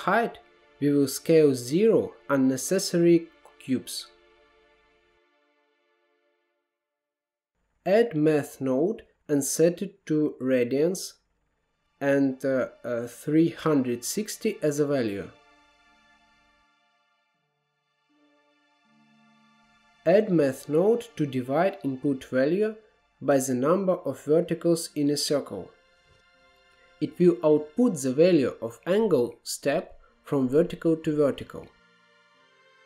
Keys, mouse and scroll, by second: 0.7-1.7 drag, 1.7 ctrl+z, 1.9 middle click, 2.8 click, 3.8 middle click, 4.1-8.0 drag, 8.0 shift+a, 12.4-14.8 drag, 14.8-15.1 scroll up 2, 15.1-15.9 middle drag, 15.9-19.6 drag, 20.3 shift+a, 21.5-24.1 drag, 24.8-28.3 drag, 29.6-31.7 drag, 32.0-32.8 middle drag.